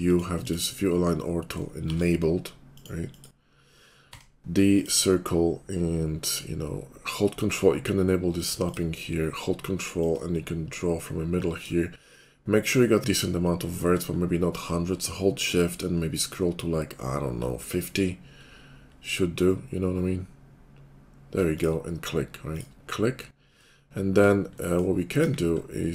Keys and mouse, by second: 1.4-3.5 shift+drag, 1.8 shift+v, 3.8-8.4 drag, 4.0 d, 8.4 middle click, 8.6 click, 8.7-10.0 middle drag, 10.0-23.0 ctrl+drag, 23.0-25.9 middle drag, 25.2 KP_5.